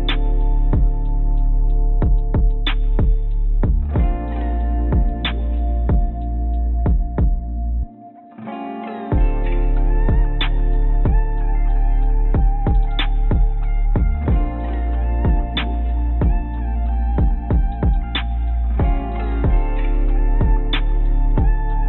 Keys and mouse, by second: 0.1 g, 2.3 click, 3.5 click, 4.0 Tab, 4.8 s, 9.6 click, 9.7 click, 10.1 s, 11.9 Tab, 12.3 z, 13.6 z, 14.2 click, 14.7 g, 16.7 click, 16.8 click, 17.7 click, 17.9 click.